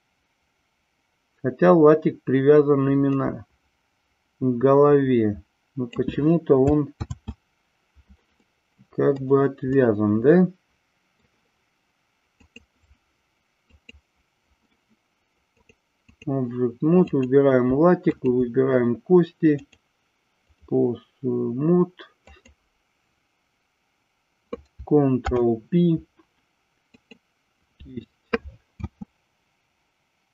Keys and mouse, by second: 7.0 ctrl+z, 8.4 middle click, 9.8-11.1 middle drag, 12.4 click, 13.8 click, 15.7 click, 17.0 click, 18.0 shift+click, 19.7-20.7 drag, 22.3-23.8 drag, 25.1 ctrl+p, 28.7 space.